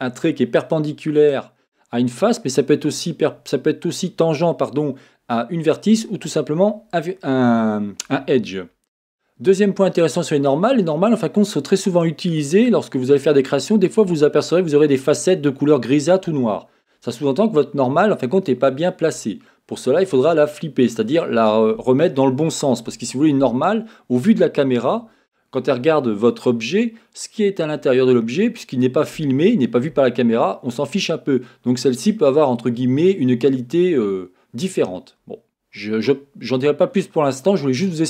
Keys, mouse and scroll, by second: 36.5-36.9 scroll down 2, 36.9-38.0 scroll up 2.